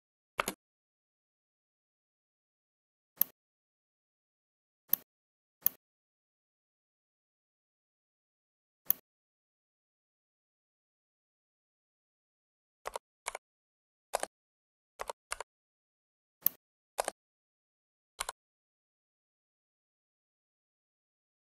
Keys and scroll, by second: 0.4 space, 13.1 ctrl+c, 15.2 ctrl+v.